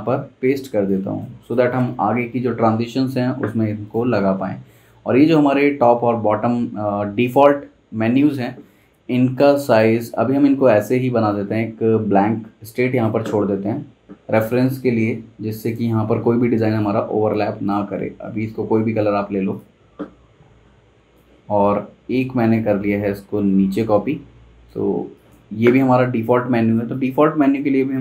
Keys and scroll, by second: 14.0 shift+super+z, 25.0 z, 25.7 v.